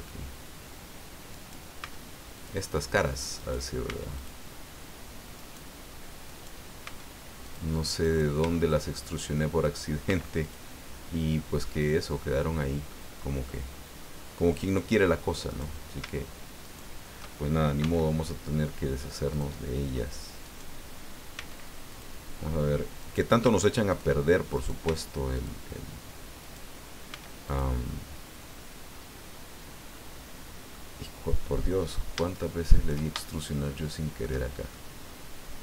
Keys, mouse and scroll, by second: 1.3 right click, 1.8 x, 2.3 click, 3.4 right click, 3.8 x, 4.1 click, 5.4 right click, 6.3 right click, 6.8 x, 7.4 click, 8.0 right click, 8.4 x, 8.7 click, 9.6 right click, 10.0 x, 10.4 click, 11.6-13.1 middle drag, 14.5 click, 15.5 right click, 16.6 shift+right click, 17.8 x, 19.3 click, 20.4 right click, 21.3 x, 21.9 click, 23.0 right click, 23.4 x, 23.9 click, 24.5 right click, 24.8 x, 25.3 click, 26.4 right click, 27.1 x, 27.4 click, 28.4-30.9 drag, 31.8 scroll up 2, 32.3 shift+right click, 33.2-34.4 shift+drag, 34.7-35.6 shift+drag.